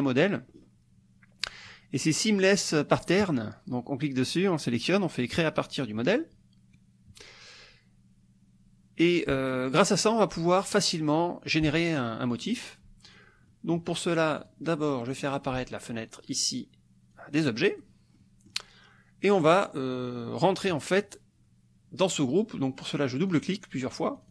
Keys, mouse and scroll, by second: 0.5-0.8 scroll down 1, 3.2 click, 5.5-6.7 drag, 9.5 click, 10.0 middle click, 12.4 middle click, 13.1 click, 13.5 click, 14.5 click, 15.1 click, 17.1 click, 18.2 click, 18.3 middle click, 18.4 click, 19.4 click, 23.3-24.3 drag.